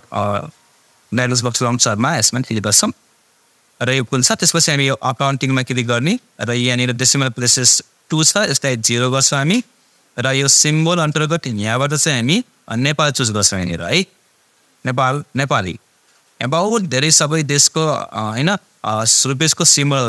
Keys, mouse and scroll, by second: 2.5 click, 3.6 click, 5.3-7.7 drag, 11.7 click, 12.9 scroll down 1, 16.5-17.0 scroll down 1.